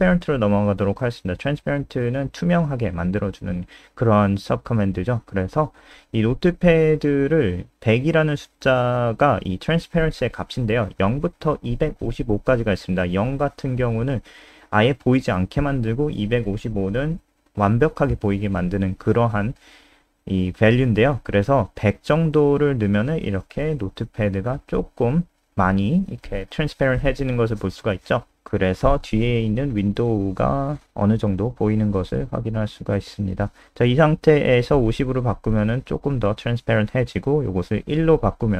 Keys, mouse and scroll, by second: 0.4-1.5 typing, 2.4 click, 3.3 ctrl+alt+space, 7.1 Home, 7.3 ;, 7.5 ctrl+s, 9.6 click, 22.1 F5, 33.9-34.9 typing, 36.9 BackSpace, 37.0 BackSpace, 37.2 1, 37.6 ctrl+s.